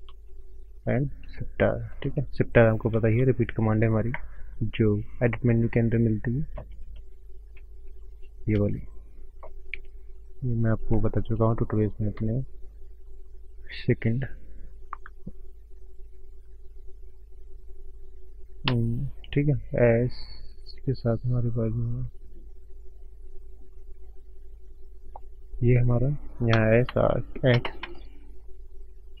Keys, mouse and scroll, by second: 0.1 shift+click, 0.2 shift+r, 0.9 click, 1.3 shift+click, 3.0 shift+r, 3.5 scroll down 5, 4.9 click, 7.0 click, 9.1 click, 9.5-9.9 scroll down 4, 9.9 scroll up 2, 10.3 click, 10.5 scroll up 2, 10.9 shift+middle click, 12.1 click, 12.6 shift+click, 18.6 s, 22.6-22.9 scroll down 5, 23.2-24.4 scroll down 13, 24.7-25.6 scroll up 8, 25.8-26.5 scroll up 6, 26.9 s, 28.3-29.2 scroll up 3.